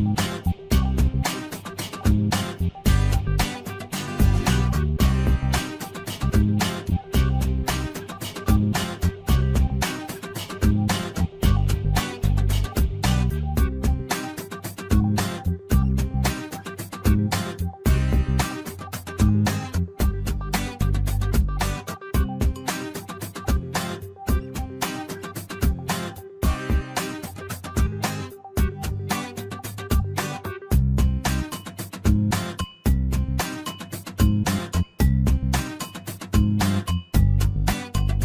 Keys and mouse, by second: 1.1 shift+middle click, 2.2 middle click, 3.2 shift+middle click, 3.5-4.8 middle drag, 5.6 middle click, 7.2 f, 7.5 middle click, 8.6 middle click, 9.7 shift+middle click, 11.6 ctrl+r, 15.4 click, 19.7 shift+middle click, 20.5 click, 21.1-22.8 drag, 23.4 click, 24.4-25.9 drag, 26.2 shift+middle click, 27.2-29.0 drag, 29.3 shift+middle click, 30.3-33.5 drag, 33.8 shift+middle click, 35.2-37.0 drag.